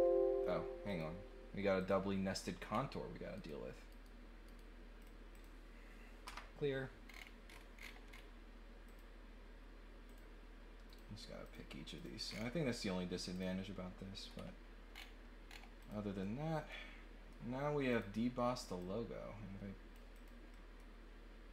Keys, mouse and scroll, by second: 0.9 click, 1.7 click, 2.7 middle click, 3.3 right click, 3.9 right click, 4.4 right click, 5.0 click, 5.3 click, 7.0 scroll down 1, 7.4-8.2 scroll up 3, 8.8 click, 10.0 click, 10.8 click, 11.4 click, 11.9 click, 12.2 scroll down 2, 13.3 click, 14.2 scroll up 2, 14.9 scroll down 2, 15.4 scroll down 1, 15.8 click, 16.2-17.3 middle drag, 17.9 click, 18.8-19.9 drag, 20.1 click, 20.5 middle click.